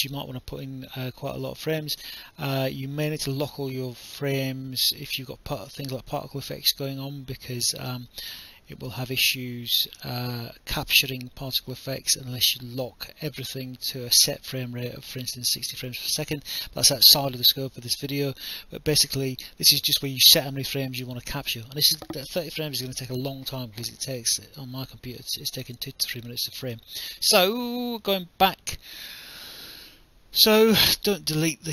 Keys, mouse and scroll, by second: 28.1 click, 28.8 BackSpace, 30.7 ctrl+z, 31.6 click.